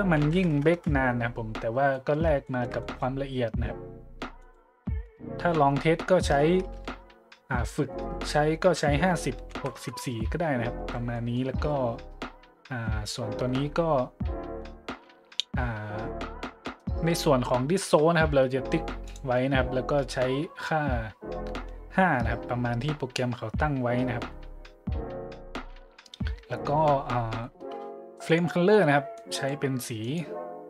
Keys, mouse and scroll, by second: 0.2 KP_1, 0.3 KP_0, 0.7 KP_Enter, 1.6 middle click, 1.9-2.2 middle drag, 2.4-2.8 shift+middle drag, 4.4 click, 9.4 KP_6, 9.5 KP_4, 9.8 KP_Enter, 10.6 middle click, 11.2-11.5 middle drag, 14.9 middle click, 19.0-19.4 drag, 22.3 middle click, 22.8 middle click, 26.7 middle click, 26.8 middle click, 28.2-28.6 drag, 29.1 click, 30.0 click.